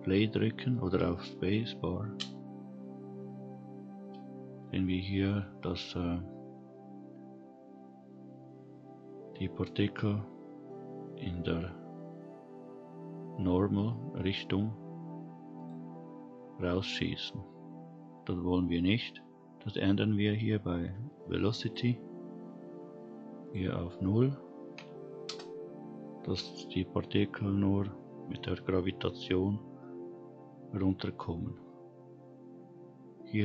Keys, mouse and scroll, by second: 2.1 space, 4.3-4.8 scroll down 2, 4.8-5.3 middle drag, 12.7-15.5 scroll up 1, 15.5 click, 17.1 click, 21.6 click, 23.4-25.2 drag, 27.7-29.0 scroll down 1, 30.6-33.4 scroll down 5.